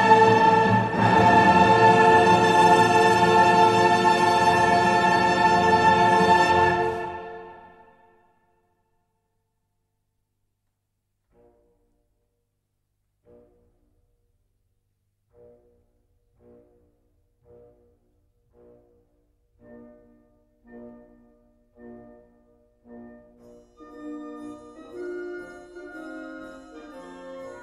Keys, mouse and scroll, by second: 2.4 click, 3.6 click, 4.6 click, 6.4 click, 7.1 click, 8.5-9.0 scroll up 1, 9.3 scroll up 1, 11.8 click, 16.3 click, 18.4 click, 19.2-21.9 typing, 22.9 1, 23.2 0, 24.9 click, 25.7 scroll down 1, 26.3-27.5 drag.